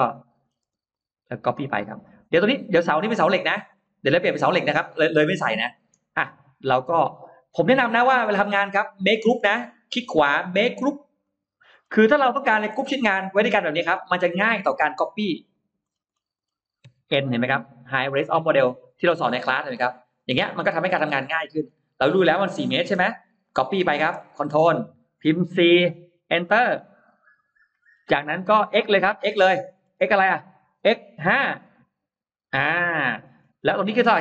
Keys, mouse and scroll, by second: 0.5 space, 0.8 click, 1.6 middle click, 3.3-3.7 scroll down 2, 3.7 middle click, 5.1-5.5 scroll up 2, 5.5 middle click, 6.0-6.3 scroll up 2, 7.1-8.1 scroll up 2, 7.9 middle click, 8.5 scroll up 1, 9.6 right click, 11.1 click, 11.6 scroll down 1, 12.2-13.1 scroll up 2, 12.4 middle click, 13.2 click, 13.7 scroll down 1, 14.5-14.8 scroll up 1, 14.7 Escape, 15.0 click, 15.3 click, 15.7-16.5 scroll down 2, 16.7 n, 17.0-18.0 middle drag, 18.2 scroll down 1, 20.0 click, 20.7-21.7 scroll down 6, 21.2 middle click, 22.1-22.5 scroll down 2, 23.3 click, 23.3 m, 25.6 4, 26.9 Return, 27.7 middle click, 27.9-28.8 scroll up 2, 29.6 scroll up 1, 30.5 x, 31.2 5, 31.5 Return, 33.2 scroll up 1, 33.3 scroll down 1, 33.7-34.2 scroll up 1.